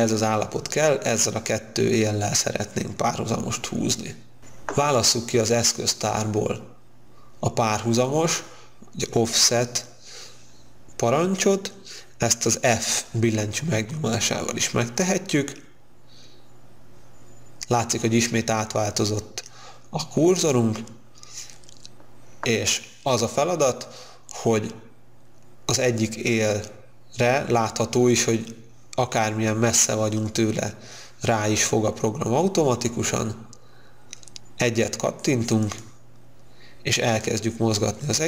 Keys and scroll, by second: 13.7 e.